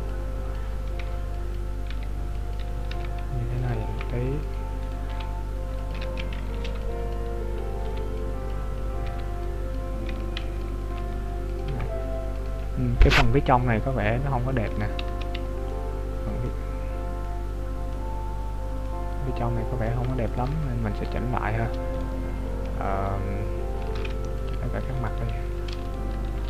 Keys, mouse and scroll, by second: 5.0 right click, 6.1 ctrl+z, 6.7 b, 12.8 scroll up 1, 14.7 Tab, 14.7 scroll up 2, 15.1 z, 15.7 middle click, 16.6-17.3 scroll down 4, 17.3 middle click, 18.1-18.5 scroll down 5, 18.9 middle click, 20.3 right click, 20.7 Tab, 22.0 right click, 22.8-23.4 scroll up 3, 23.4 scroll down 2, 24.0 ctrl+Tab, 25.1 alt+right click, 26.0 alt+shift+right click.